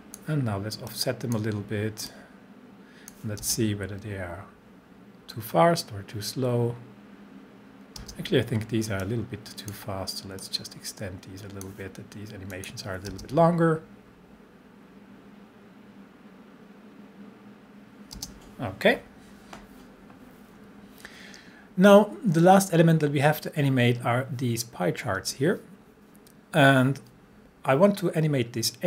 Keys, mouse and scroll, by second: 0.4-0.9 drag, 3.4 space, 8.0 space, 9.0-10.0 drag, 13.1 space, 18.1 space.